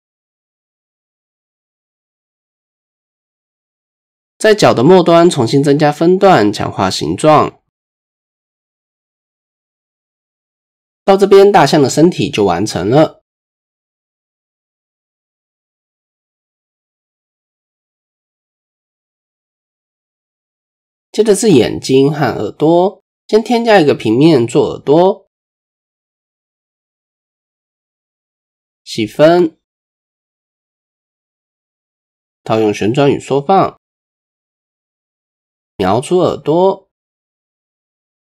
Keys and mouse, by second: 0.5 KP_1, 1.5 shift+click, 3.4 shift+click, 4.3 ctrl+r, 6.4 ctrl+r, 8.6 Tab, 10.5 click, 10.8-13.8 middle drag, 14.2 KP_1, 14.7 KP_3, 15.9-16.6 shift+middle drag, 17.2 KP_1, 17.9-18.6 shift+middle drag, 19.4-19.7 shift+middle drag, 21.3 click, 22.2 click, 22.9 shift+click, 23.7-24.1 shift+drag, 24.4 shift+a, 26.8-27.7 drag, 30.1 ctrl+4, 31.4-31.9 shift+middle drag, 31.9 shift+click, 33.4 ctrl+a, 34.1 Tab, 34.8-36.7 right drag.